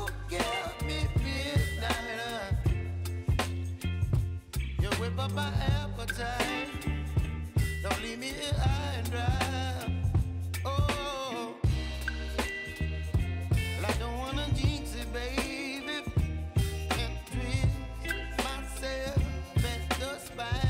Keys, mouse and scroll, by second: 3.2-20.6 drag.